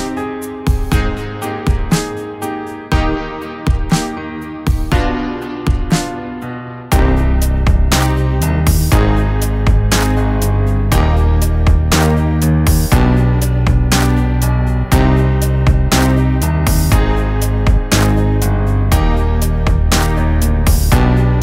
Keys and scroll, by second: 4.6 g, 17.6 ctrl+z.